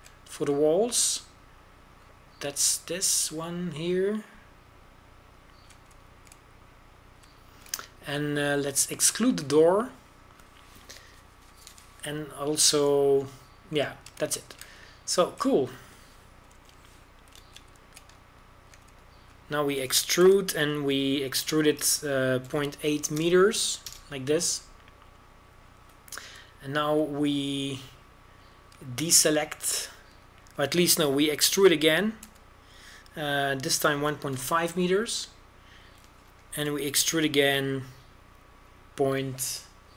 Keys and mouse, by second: 2.3-9.1 middle drag, 9.2-14.4 middle drag, 15.0-16.2 drag, 16.5 middle click, 18.3 t, 18.4 n, 19.3 shift+space, 22.5 e, 34.1 e, 38.4 e.